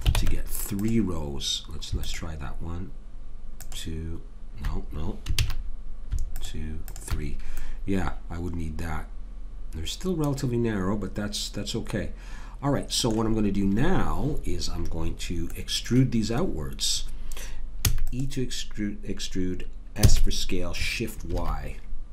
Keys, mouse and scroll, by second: 0.2 ctrl+Tab, 2.1-5.2 drag, 5.4 ctrl+z, 6.3 click, 7.6 middle click, 7.9 click, 15.5-17.3 middle drag, 17.8 e, 20.0 s.